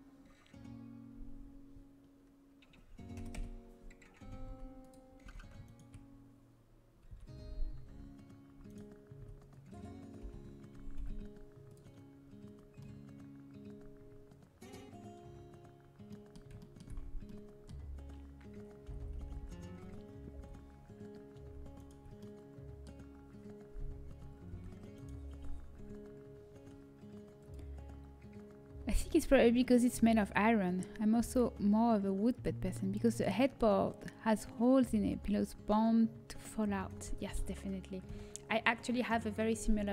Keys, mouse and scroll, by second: 4.7 click, 4.7 a, 5.2 a, 7.9 v, 9.1 a, 10.4 l, 16.0-17.6 middle drag, 18.7-19.2 l, 19.9 l, 20.3 h, 22.1-24.0 middle drag, 24.5 v, 38.0 Delete, 38.7 click.